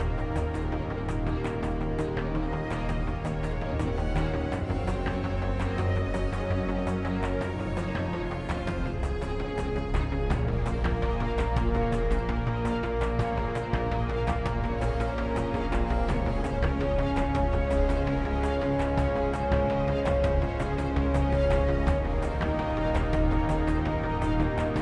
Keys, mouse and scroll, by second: 2.4 z, 2.5 z, 2.8 Tab, 3.7-5.6 typing, 4.5 Tab, 6.9 shift+space, 7.3 KP_1, 7.9 z, 8.7 g, 10.9 Tab, 11.4 ctrl+Tab, 11.7 s, 15.0-16.7 typing, 18.9 Tab, 19.1 Tab, 19.7 space, 20.8 f, 21.1 i, 22.9 KP_1, 23.0 KP_Decimal, 23.1 shift+space, 24.0 e.